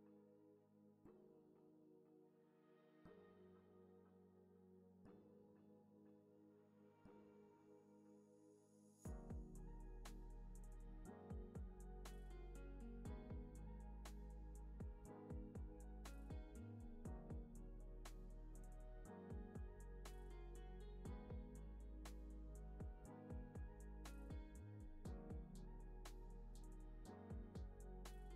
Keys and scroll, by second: 2.5 alt+x, 3.9 super+-, 7.9 space, 9.7 space, 16.1 z, 16.5 x, 17.1 z, 17.5 x, 18.9 super+=, 19.9 space, 21.5 z, 22.0 x, 22.5 z, 27.9-28.3 typing.